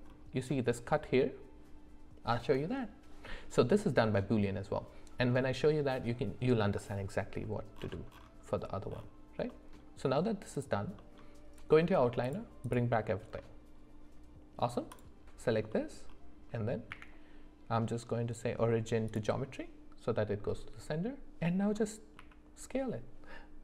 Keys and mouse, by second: 11.0 middle click, 12.2 click, 12.6 click, 13.4-14.6 middle drag, 15.7 middle click, 16.9 q, 22.2 s.